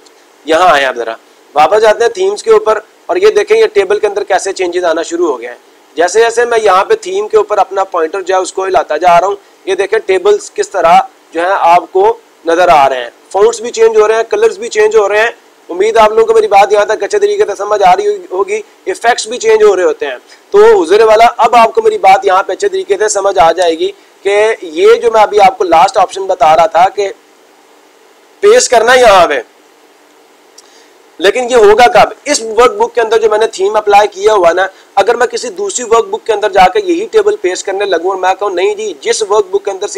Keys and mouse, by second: 2.0 click, 26.9 click, 27.2 click, 27.4 click, 27.8 click, 29.5 click.